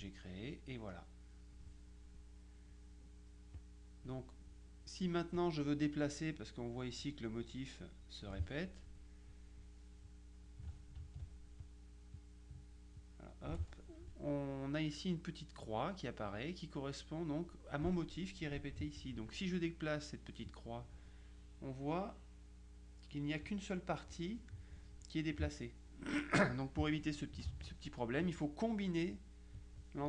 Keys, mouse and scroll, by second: 0.7-2.1 middle drag, 3.7 click, 4.5-5.5 middle drag, 11.7 shift+click, 13.1 click, 20.6-24.0 drag, 27.5 ctrl+z.